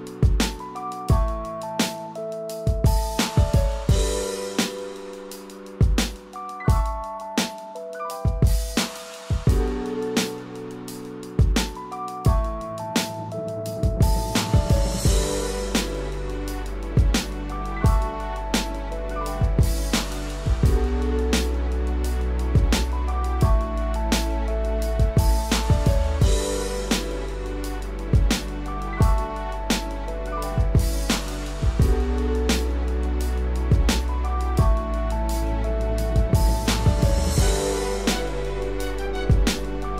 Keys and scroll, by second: 23.3 ctrl+-, 28.5 ctrl+-, 28.8 ctrl+=, 30.0 ctrl+-.